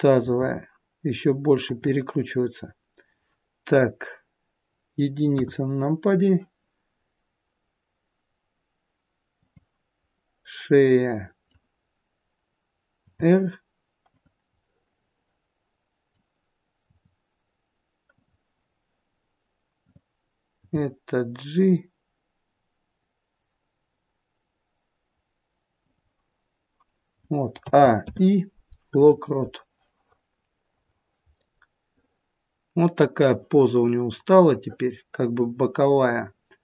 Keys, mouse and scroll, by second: 0.1 r, 5.2 KP_1, 9.4 click, 10.1 middle click, 13.0 r, 14.5 middle click, 16.8 r, 19.7 click, 20.5 g, 27.5 a, 28.0 i, 31.3 middle click.